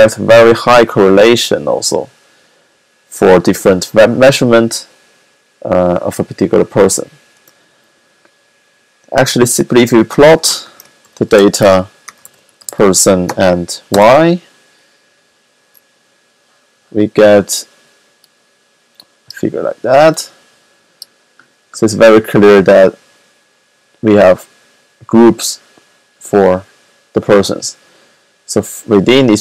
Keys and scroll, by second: 10.0-13.8 typing.